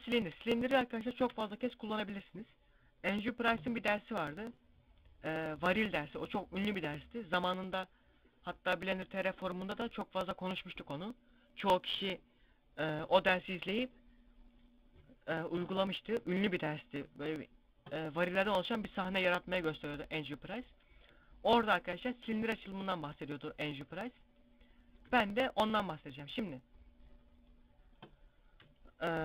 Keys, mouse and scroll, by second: 0.2 right click, 1.0 KP_Divide, 23.5 Tab, 25.0 Tab, 28.8 scroll down 1.